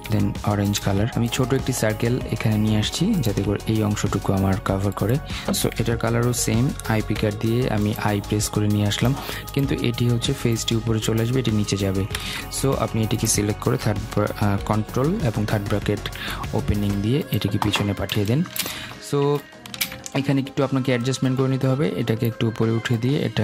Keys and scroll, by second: 11.8 ctrl+z, 14.9 ctrl+[.